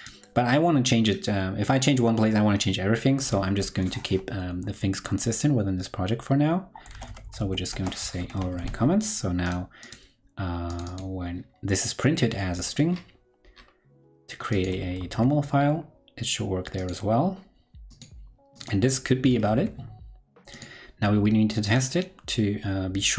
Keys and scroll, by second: 8.1 super+Right, 8.3 super+s, 14.9 super+s, 19.4 super+s.